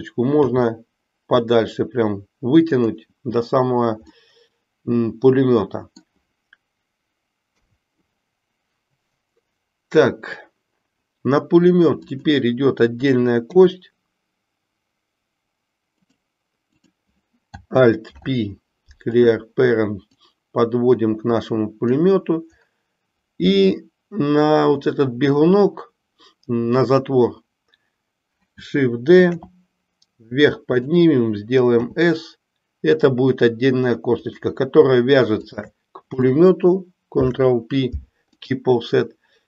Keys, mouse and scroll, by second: 0.3 g, 4.2-6.2 middle drag, 12.0 click, 13.5 e, 16.6 click, 18.0 alt+p, 20.2-22.0 drag, 29.2 shift+d, 31.7 s, 35.3 shift+click, 37.1 ctrl+p.